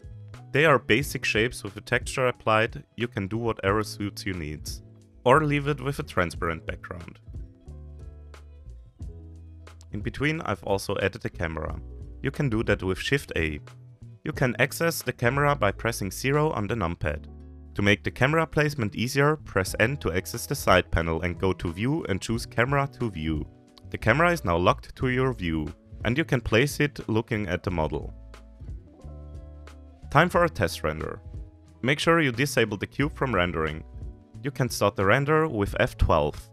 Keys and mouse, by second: 0.0-2.5 typing, 1.1 click, 1.4 click, 1.9 shift+middle click, 2.2 shift+middle click, 3.1 click, 3.2 shift+middle click, 3.9 middle click, 4.2 ctrl+s, 5.3 shift+middle click, 6.1 shift+middle click, 6.8 middle click, 7.9 shift+click, 8.1 middle click, 8.3 shift+g, 8.9 middle drag, 9.2 shift+click, 9.6 Delete, 10.8 shift+a, 14.9 KP_0, 16.2 n, 23.7 middle click, 25.1 middle click, 26.3-27.0 shift+middle drag, 27.7-28.4 shift+middle drag, 29.2 click, 34.7 click.